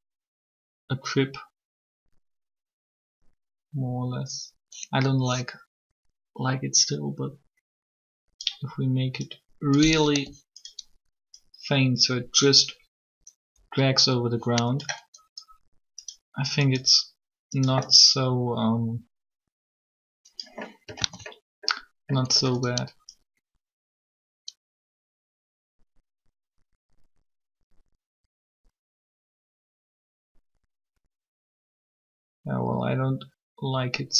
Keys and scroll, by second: 10.1 r, 21.0 alt+a.